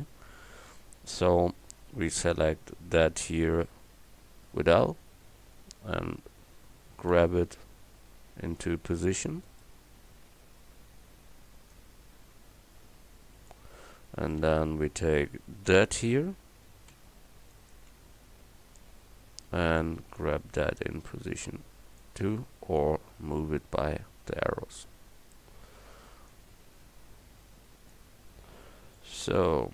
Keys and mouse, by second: 0.7 a, 2.4 l, 7.9 g, 9.7-13.5 drag, 14.4 a, 16.9 l, 17.9 l, 22.8-24.8 drag, 26.3-28.6 drag, 28.6 Tab.